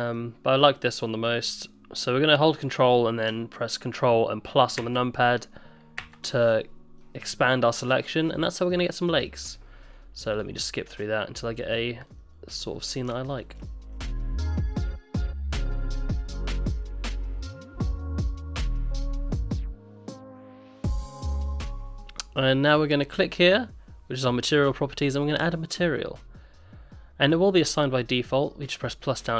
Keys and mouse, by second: 0.2-1.2 middle drag, 4.8 ctrl+KP_Add, 6.0 ctrl+KP_Add, 7.0 middle click, 8.5 middle click, 10.3 click, 10.6 middle click, 11.7 click, 12.2 middle click, 13.7 middle click, 14.1 middle click, 14.2 middle click, 14.3 middle click, 14.4 middle click, 14.6 middle click, 14.7 middle click, 15.0 middle click, 15.5 middle click, 15.7 middle click, 15.8 middle click, 16.1 ctrl+z, 16.5 ctrl+KP_Add, 16.5 middle click, 16.7 middle click, 17.4 middle click, 17.7 ctrl+z, 17.7 middle click, 17.8 middle click, 18.1 shift+click, 18.2 middle click, 18.4 middle click, 18.6 middle click, 18.9 middle click, 19.1 ctrl+KP_Add, 19.2 middle click, 19.3 middle click, 19.4 middle click, 19.5 middle click, 19.6 middle click, 19.7 middle click, 19.8 middle click, 20.1 click, 20.1 middle click, 20.2 middle click, 20.3 middle click, 20.4 ctrl+z, 20.4 ctrl+z, 20.6 ctrl+KP_Add, 20.8 middle click, 21.2 ctrl+KP_Subtract, 21.3 middle click, 21.5 ctrl+z, 25.2 click, 27.6 click.